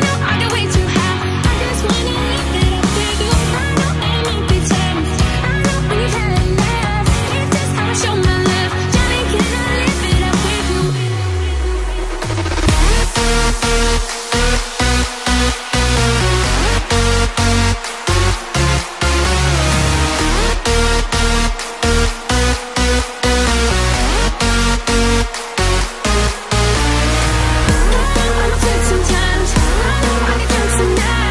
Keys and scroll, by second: 3.2 [, 5.8 [, 5.9 [, 6.1 [, 6.5 [, 9.2 [, 9.3 [, 9.5 [, 9.9 [, 11.6 [, 30.2 ].